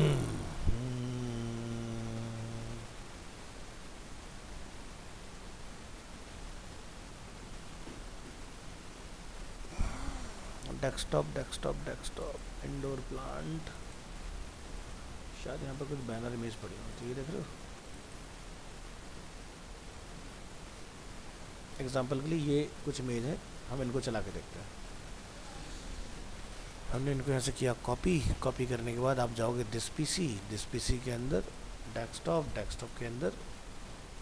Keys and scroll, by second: 25.4 alt+Return, 27.3 ctrl+c.